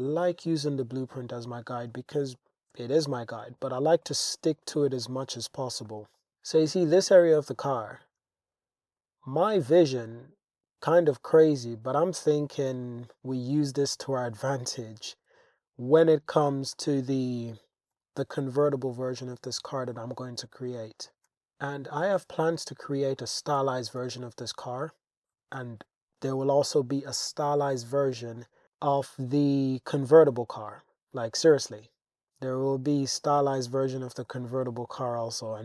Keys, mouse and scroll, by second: 0.1 click, 0.3 g, 0.5 g, 0.9 click, 1.5 click, 1.7 g, 1.9 g, 2.4 click, 2.8 Tab, 3.4 click, 4.2 click, 4.6 click, 5.1 Tab, 5.9 shift+click, 7.2 click, 8.0 g, 8.2 g, 9.0 click, 10.9 click, 12.8 click, 15.3 e, 16.8 y, 17.7 click, 17.9 g, 18.2 z, 18.9 click, 19.9 click, 21.3 g, 21.4 x, 21.7 g, 22.0 x, 23.2 click, 23.6 e, 24.0 x, 24.7 click, 25.3 g, 25.6 y, 26.7 click, 27.8 click, 28.6 g, 28.6 z, 28.8-29.8 drag, 30.7 click, 32.3 click, 33.7 e, 34.2 y, 35.4 click.